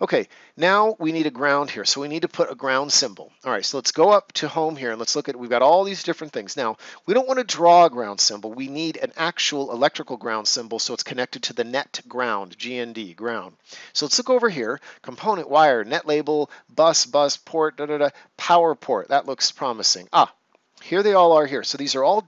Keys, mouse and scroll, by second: 19.1 click.